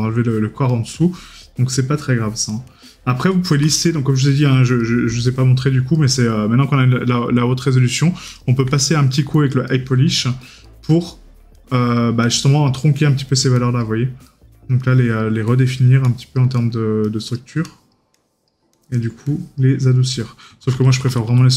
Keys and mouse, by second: 4.3 right click, 8.9 right click, 14.3 right click, 16.6 right click, 19.9 right click.